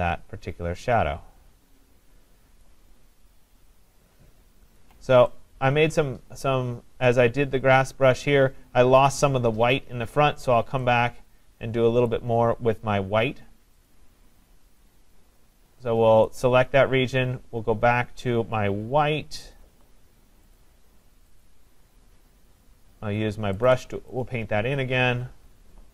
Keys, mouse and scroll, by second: 2.7 click, 4.8 alt+click, 7.9 click, 10.9 click, 12.1 click, 13.9 click, 16.2 click, 20.6 click, 21.5 click, 23.7 click.